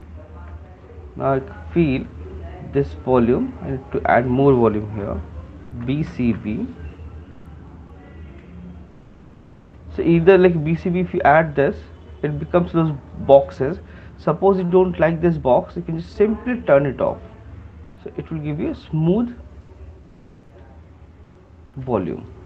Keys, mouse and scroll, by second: 0.9 alt+click, 1.2 click, 2.3 click, 3.6 click, 5.9-6.7 typing, 7.9 click, 8.3 click, 9.7 shift+click, 10.6 click, 13.3 shift+click, 16.2 click, 16.8 click, 18.5 click, 19.2 click, 20.0 click, 20.5 click, 21.8 shift+click.